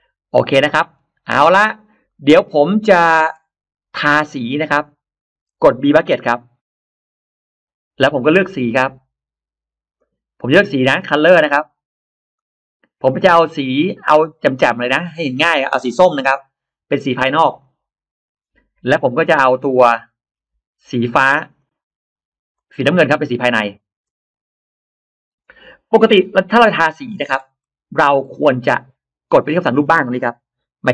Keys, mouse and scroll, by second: 0.1 scroll up 1, 0.2 middle click, 1.2 scroll up 1, 1.5 click, 1.8-2.1 scroll up 2, 1.9 middle click, 2.2-3.0 scroll down 2, 2.8 middle click, 4.2 scroll up 2, 8.6-8.9 drag, 9.8 click, 12.2 click, 14.4 scroll down 2, 15.3-15.6 scroll down 2, 16.1 click, 17.4 click, 18.7 scroll down 2, 19.3-20.1 scroll down 4, 21.4 click, 22.4 click, 23.5 click, 26.4 scroll down 2, 27.4 middle click, 28.3 middle click, 30.8 middle click.